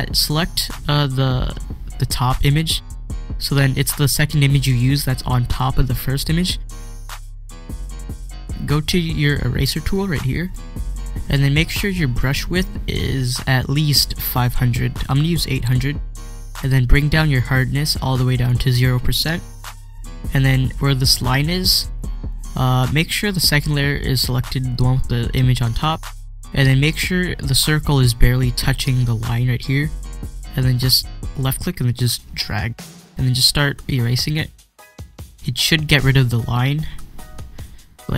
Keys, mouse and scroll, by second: 4.0 click, 5.6 click, 10.4-20.8 drag, 31.3-38.1 drag.